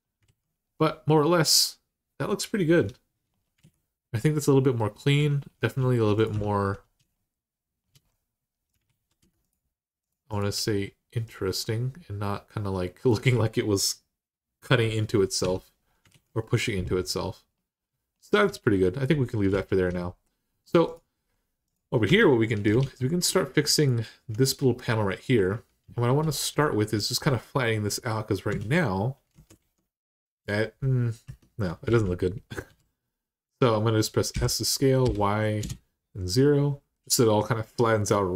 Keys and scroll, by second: 0.0 alt+z, 2.5 Tab, 3.4 alt+z, 6.1 Tab, 8.6 alt+z, 15.2 Tab, 15.9 alt+z, 21.8 Tab, 22.6 alt+z, 28.3 Tab, 29.4 alt+z, 31.0 Tab, 31.7 alt+z, 32.5 s, 34.1-34.8 typing, 35.4 Return.